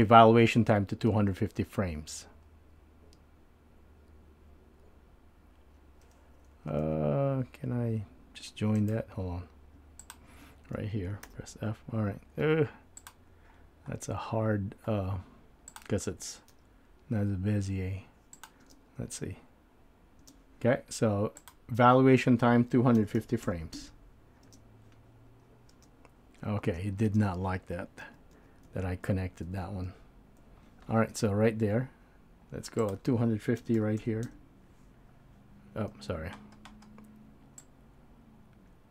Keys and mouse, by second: 1.1 e, 10.0 shift+click, 11.3 f, 13.0 click, 15.7 click, 16.6 g, 18.8 space, 21.5-23.8 drag, 21.5 space, 24.6 space, 26.6 space, 27.9 super+space, 28.0 super+z, 28.5 super+z, 28.8 super+z, 29.2 super+z, 29.6 super+z, 30.0 super+z, 32.8-34.3 drag, 37.6-38.9 drag.